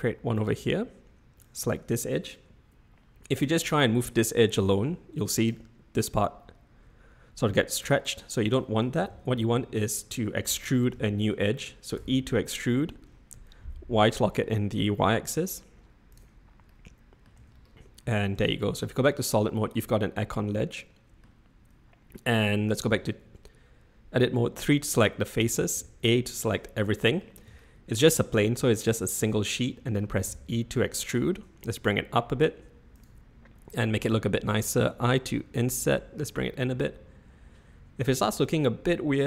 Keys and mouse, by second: 1.5 click, 4.7 click, 8.1 click, 9.1 x, 10.5 ctrl+z, 10.9 ctrl+z, 12.0 e, 16.6-17.1 middle drag, 17.1 click, 17.3 Tab, 18.3 z, 19.8-21.2 middle drag, 22.8 Tab, 24.5 3, 25.7 a, 26.5-27.2 drag, 27.6-28.0 shift+drag, 29.6 click, 30.2 e, 34.6 i.